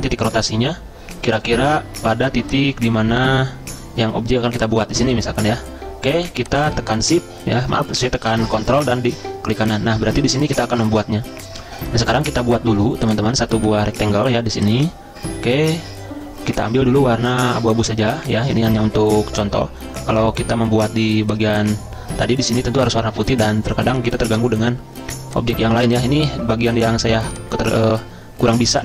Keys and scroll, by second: 23.3 z.